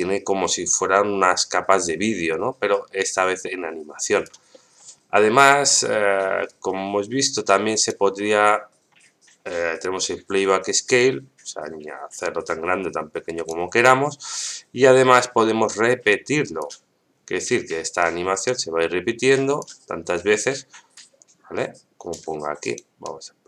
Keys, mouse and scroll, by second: 4.5 middle click, 6.5 right click, 7.3 right click, 11.0-13.5 drag, 15.2-16.6 drag, 17.9-19.6 drag, 20.9-22.1 drag, 22.6 right click, 23.0-23.4 drag.